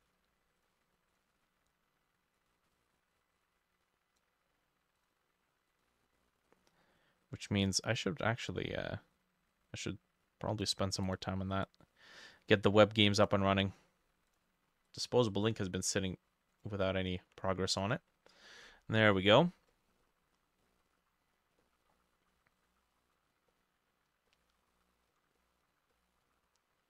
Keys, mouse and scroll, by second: 19.2-20.1 scroll down 5, 19.7 middle click, 20.1-20.7 scroll up 4, 20.7 middle click, 20.9-21.4 scroll up 3, 21.4 scroll down 1, 21.7 middle click, 23.5 middle click, 24.3 middle click, 25.4 middle click, 25.8 scroll down 1, 26.0 middle click, 26.3-26.8 scroll up 4.